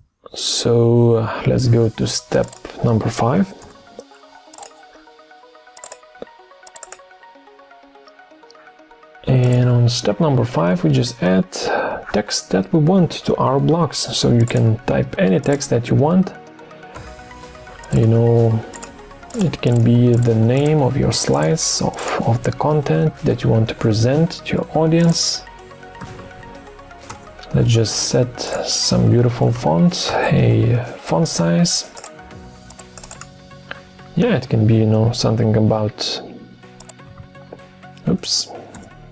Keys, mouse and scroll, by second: 3.6 typing, 18.7 shift+click, 19.3 shift+click, 19.7 shift+click, 20.1 shift+click, 20.3 shift+double click, 20.6 shift+click, 21.3 shift+click, 25.7-26.9 typing, 27.0 Return, 29.2-30.0 typing, 36.9-38.6 typing.